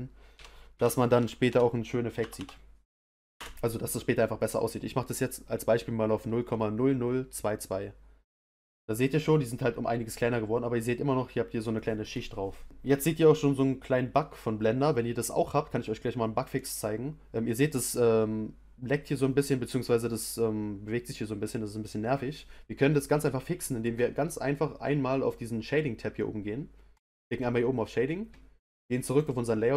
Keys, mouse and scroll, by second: 1.4 0, 2.3 2, 9.1-13.4 middle drag, 15.7-16.2 scroll down 1, 16.2-17.5 scroll up 2, 17.5-19.3 scroll up 1, 19.3-19.8 scroll up 1, 27.5-28.7 drag, 29.1 click.